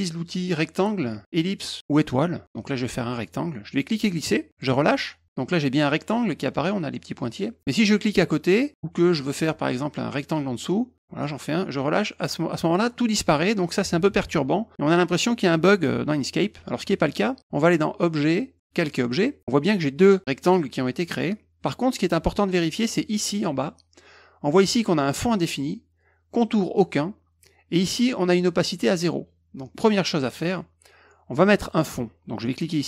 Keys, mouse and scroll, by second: 3.7 click, 10.6 click, 18.1 click, 18.7 click, 19.9 click, 20.4 click, 21.0 click.